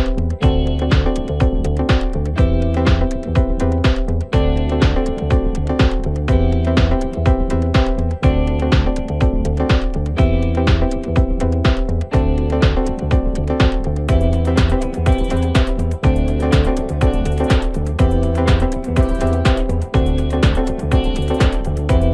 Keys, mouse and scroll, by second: 0.9 ctrl+r, 3.3-3.7 scroll down 1, 3.7 middle click, 4.3-5.4 scroll up 1, 5.4 ctrl+r, 8.5 s, 9.8 Tab, 10.1-11.2 scroll down 3, 11.2 ctrl+2, 12.2 KP_1, 13.5-14.3 right drag, 14.3-14.7 scroll down 4, 14.7-15.8 middle drag, 15.8 drag, 16.2-17.8 middle drag, 17.8-18.5 scroll up 2, 18.5 KP_1, 20.4 click, 20.7-21.4 scroll up 3, 21.4 Tab.